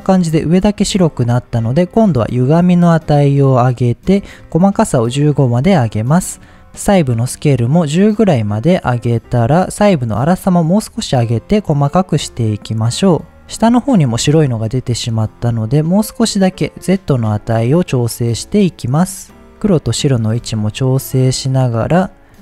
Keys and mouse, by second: 1.1 shift+click, 2.7-4.0 drag, 4.4-5.6 drag, 6.4 click, 7.3-9.4 drag, 10.0-13.4 drag, 13.5 middle click, 14.5 shift+click, 15.0 middle click, 17.4-19.4 shift+drag, 19.4 middle click, 20.7-22.4 shift+drag.